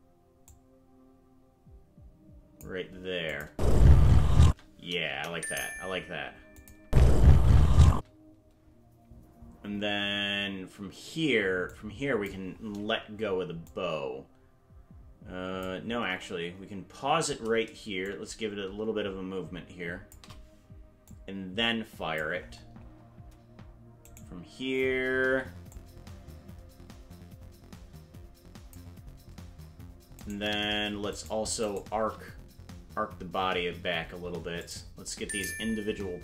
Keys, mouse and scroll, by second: 0.4-2.6 drag, 3.3-4.3 drag, 3.5 space, 4.4 space, 5.1 KP_0, 6.6 click, 6.8 space, 11.7 click, 13.7-15.7 drag, 16.0 KP_0, 18.0-20.2 shift+drag, 21.1-22.2 drag, 24.1 right click, 25.7-28.8 drag, 30.2 right click, 31.2 shift+right click, 31.7 shift+right click, 34.6 click.